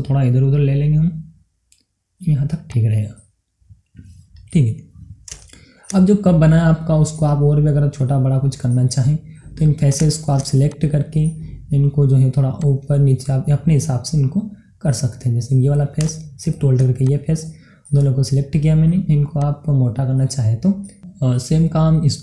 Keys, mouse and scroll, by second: 2.7 click, 3.5 scroll down 1, 3.6-6.6 middle drag, 6.6 scroll up 1, 7.0-9.8 middle drag, 9.8 click, 10.6 shift+click, 11.1-12.6 middle drag, 12.6-14.5 drag, 14.5-16.0 middle drag, 16.0 click, 17.0 shift+click, 17.9 middle click, 18.5 scroll down 1, 19.4-20.7 drag, 20.7 middle click, 21.7 scroll down 1.